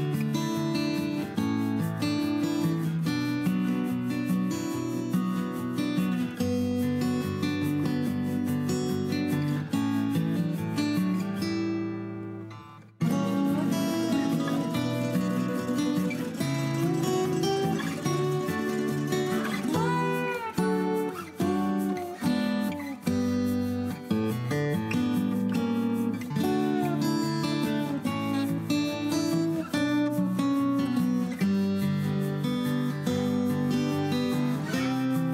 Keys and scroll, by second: 1.1 b, 1.5 Escape, 1.7 Escape, 2.9 Escape, 10.9-12.5 typing, 13.8-17.1 typing, 16.2 Escape, 16.3 Escape, 18.4-19.7 typing, 20.3 Escape, 21.6 ctrl+h, 22.1 p, 23.0 Escape, 23.1 Escape, 23.4 alt+h, 28.3 h, 28.9 m.